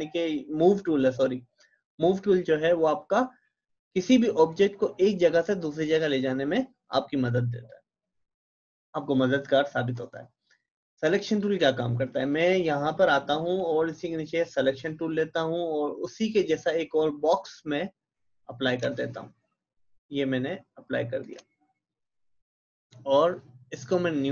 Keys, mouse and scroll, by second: 4.3 click, 11.4-23.9 drag.